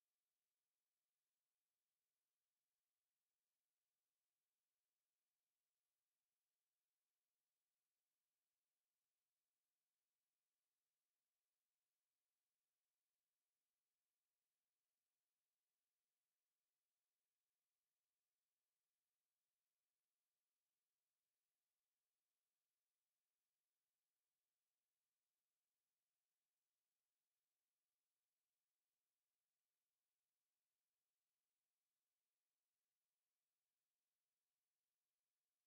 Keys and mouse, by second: 3.9 middle click, 5.5 middle click, 7.9 ctrl+z, 8.1 ctrl+z, 8.5 ctrl+z, 8.9 ctrl+z, 10.7-12.3 drag, 12.5-15.8 middle drag, 23.9 a, 26.4 ctrl+r.